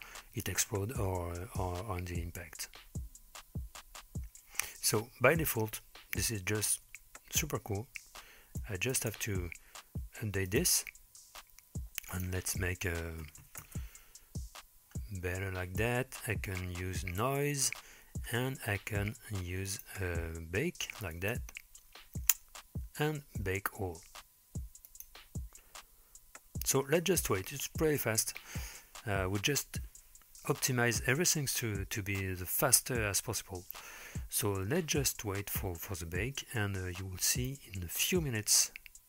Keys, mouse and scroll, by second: 9.1 space, 10.5 click, 12.1-13.8 drag, 14.8-16.4 scroll down 4, 16.4 scroll down 1, 17.7 click, 18.1-19.7 scroll down 3, 19.7-21.5 drag, 24.9-39.0 drag.